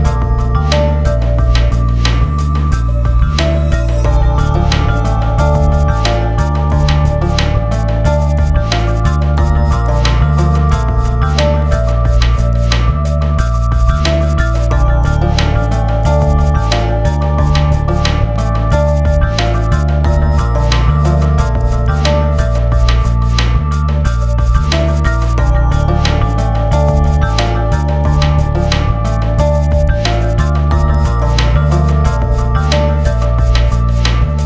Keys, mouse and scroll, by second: 0.3 click, 0.7 scroll down 1, 3.9 click, 4.8 scroll down 1, 6.4-7.2 scroll down 1, 8.8 scroll down 1, 10.0 click, 11.7-12.9 typing, 16.4 right click, 17.0-17.8 typing, 17.3 click, 21.1 Return, 22.5-24.2 drag, 24.2 F4, 24.7-29.0 drag, 29.0 scroll up 1, 30.0 click, 31.0-32.2 drag, 32.2 scroll up 1, 32.7-34.4 drag.